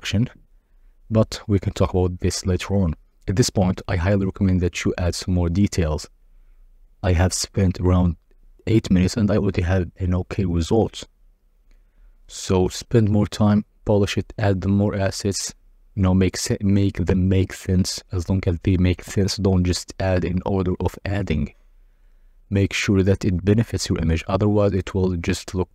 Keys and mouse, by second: 4.2 x, 6.9 g, 7.2 z, 7.5 shift+click, 11.5-13.0 typing, 15.4 s, 16.3 g, 16.5 shift+z, 18.6-19.0 drag, 20.0 g, 20.5 shift+z, 20.8 shift+click, 21.2 r, 21.5 z, 23.5 g, 24.0 z, 24.9 g, 24.9 shift+z, 25.2 shift+click.